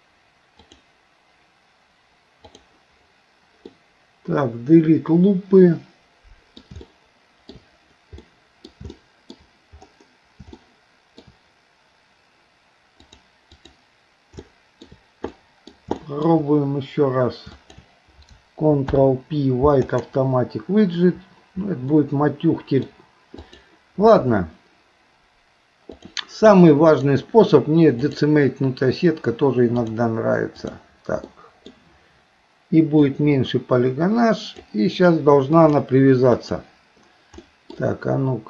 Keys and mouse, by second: 0.8-2.0 drag, 2.7 click, 3.8-6.6 middle drag, 6.9 shift+middle click, 8.3 middle click, 9.0 shift+middle click, 10.7 shift+middle click, 13.1 click, 14.5 shift+middle click, 15.4 middle click, 16.0 shift+middle click, 17.6 shift+click, 18.9 ctrl+p, 22.0 middle click, 23.5 click, 26.0 click, 27.0-28.3 drag, 29.9 click, 30.8 click, 31.3 middle click, 33.1-34.7 drag, 35.5-36.7 drag, 37.5 middle click.